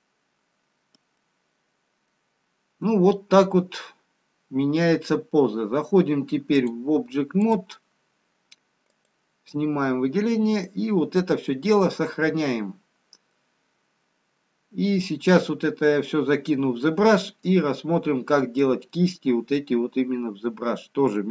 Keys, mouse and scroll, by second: 0.6 scroll up 1, 1.4 middle click, 1.4 scroll down 3, 4.9 middle click, 4.9-5.3 scroll up 3, 7.1 click, 8.0-8.5 scroll down 1, 9.2 click, 9.2 scroll down 1, 10.2 middle click, 11.2 middle click, 12.8-13.8 scroll up 2, 13.8 middle click, 17.4 scroll down 2, 18.2-18.8 scroll down 1, 19.0 middle click.